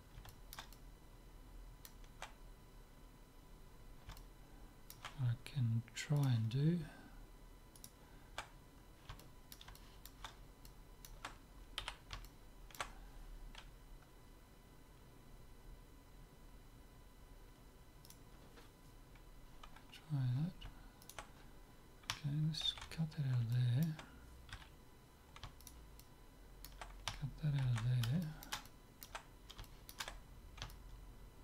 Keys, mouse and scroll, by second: 0.3-2.7 middle drag, 4.2-6.4 middle drag, 6.4-8.1 drag, 7.9-9.6 right drag, 9.2 click, 9.6-12.6 middle drag, 11.8 c, 19.7 right click, 20.1-23.4 middle drag, 21.1-23.0 right drag, 22.7 ctrl+x, 23.6-25.6 middle drag, 24.6 z, 25.7-27.4 right drag, 26.0-27.6 drag, 27.6 ctrl+x, 28.3-31.4 middle drag.